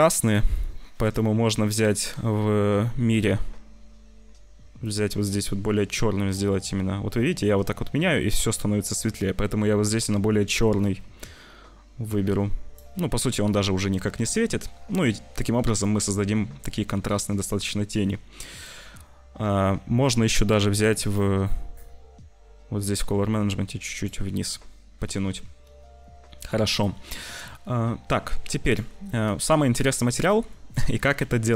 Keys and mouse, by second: 0.2 click, 0.9 click, 14.1 ctrl+s, 20.7 middle click, 23.0-24.2 middle drag, 25.1 ctrl+s, 28.0 c, 28.3 ctrl+s, 28.6 click, 30.2 click, 31.1 ctrl+s.